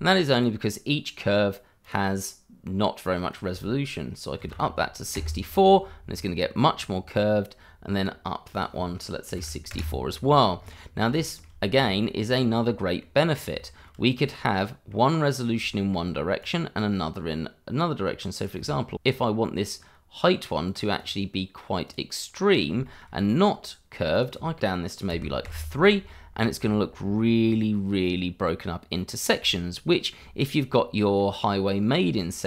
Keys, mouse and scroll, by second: 0.3 click, 4.4 typing, 5.1 Return, 5.9-7.0 scroll down 1, 7.0 click, 9.3 typing, 9.7 Return, 10.5-11.0 scroll up 1, 11.1 shift+middle click, 12.3 scroll up 1, 12.5 middle click, 13.2-13.5 scroll down 1, 13.5 shift+middle click, 14.1 middle click, 15.6 shift+middle click, 15.8 middle click, 16.4 click, 19.4-20.6 scroll down 1, 20.6 click, 21.1 double click, 21.8 click, 22.8 shift+middle click, 24.1 click, 25.1 3, 25.4 Return, 26.2-26.6 scroll down 1, 26.6 shift+middle click, 27.4-27.8 scroll up 1, 29.1 scroll down 1, 29.5 shift+middle click, 30.7 scroll down 1, 31.2 middle click, 32.3 shift+middle click.